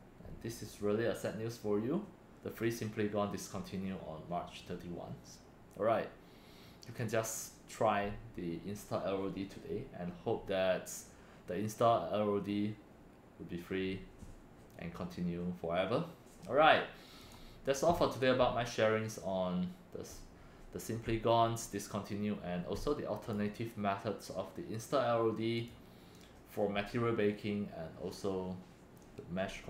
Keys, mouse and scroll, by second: 6.8 click, 17.2 click, 23.2 click, 23.5 right click, 25.5 click.